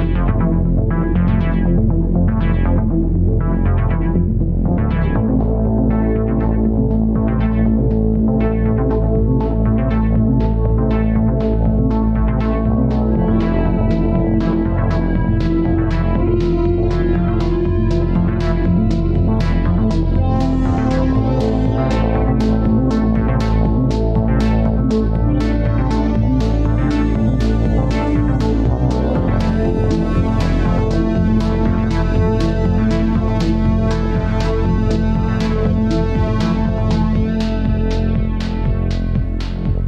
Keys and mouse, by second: 4.4 click, 8.5 drag, 9.2-11.3 drag, 36.1 ctrl+s, 36.5 Tab, 39.4 shift+d.